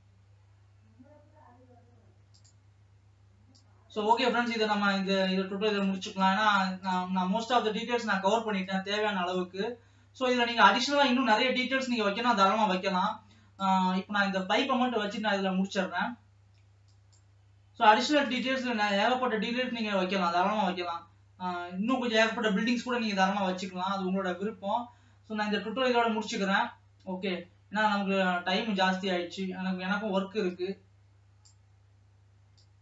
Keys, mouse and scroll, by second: 4.7-32.8 drag.